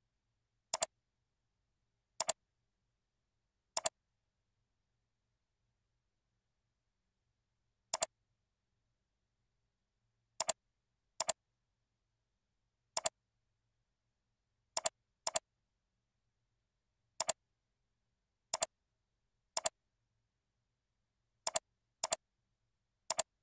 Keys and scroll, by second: 14.4 ctrl+c, 16.1 ctrl+v, 21.0 ctrl+c.